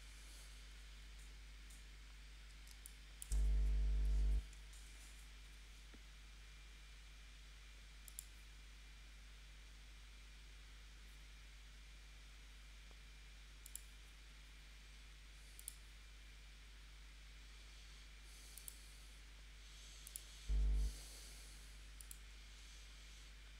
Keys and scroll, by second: 2.7 space, 3.9 p.